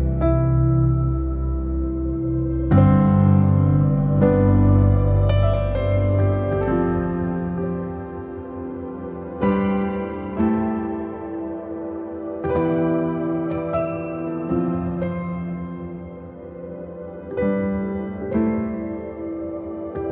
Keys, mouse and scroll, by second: 9.6-13.8 drag, 13.9-14.8 scroll down 3, 14.8 shift+middle click, 15.4-15.9 scroll down 3, 15.9-16.9 shift+middle drag, 16.9 shift+a, 17.3-18.0 scroll down 2, 18.0 click, 19.5 shift+scroll down 1, 19.6 shift+middle click, 19.7-20.1 scroll up 2.